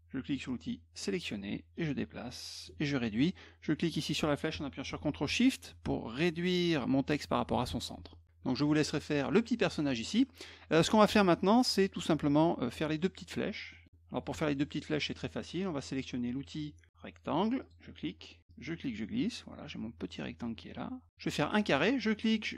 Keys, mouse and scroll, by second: 1.0 click, 1.8 click, 3.9-7.7 drag, 8.1 click, 13.7 middle click, 17.6 click, 18.5-21.1 drag, 22.0-22.5 drag.